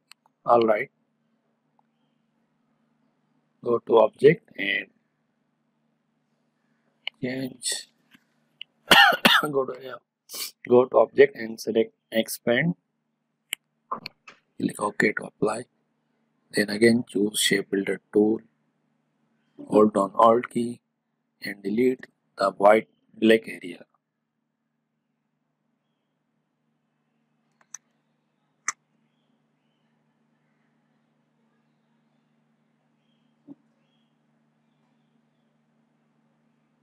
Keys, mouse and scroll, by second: 12.5-17.4 drag, 17.4-21.6 drag, 21.9 click, 22.2-27.1 alt+drag, 27.7 space, 27.9-29.3 ctrl+drag, 29.3-36.8 alt+drag, 34.5-35.7 alt+drag.